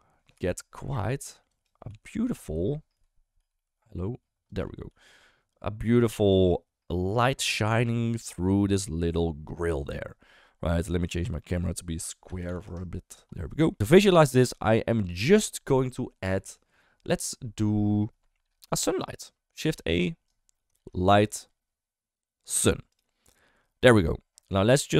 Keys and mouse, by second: 0.8 g, 1.8 middle click, 2.4 Escape, 2.9 KP_0, 3.4 g, 4.9 g, 11.6-12.7 drag, 20.3 right click, 20.7 shift+a, 23.9 middle drag, 24.7 middle drag.